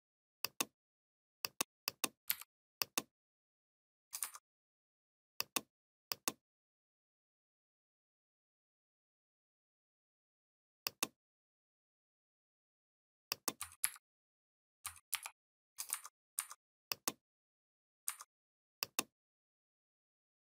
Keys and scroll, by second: 2.1 v, 13.6 ctrl+c, 15.0 ctrl+f.